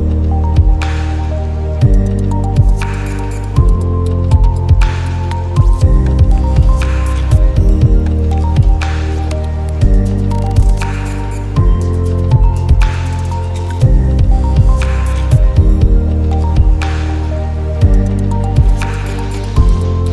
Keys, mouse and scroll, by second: 0.5 click, 1.3 ctrl+z, 2.4 click, 4.1 ctrl+z, 4.5 click, 5.1-7.2 shift+drag, 7.2 click, 7.8-9.7 shift+drag, 9.7-12.4 shift+drag, 15.1 Down, 15.8 click, 16.5 Right, 16.7 Down, 17.2-19.6 drag, 17.8-19.6 shift+drag, 19.6 Down.